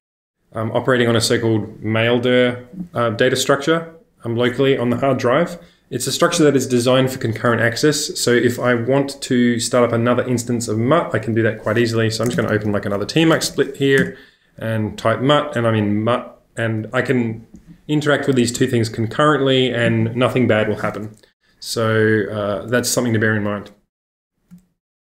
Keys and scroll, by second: 12.3-14.1 typing, 12.3 ctrl+space, 24.9 shift+super+@.